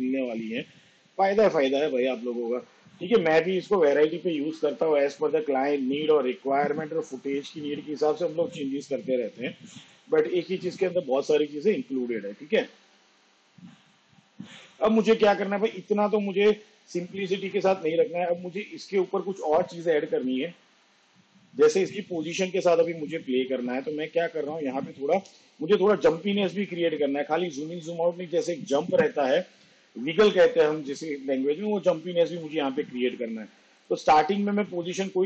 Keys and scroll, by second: 25.1 p.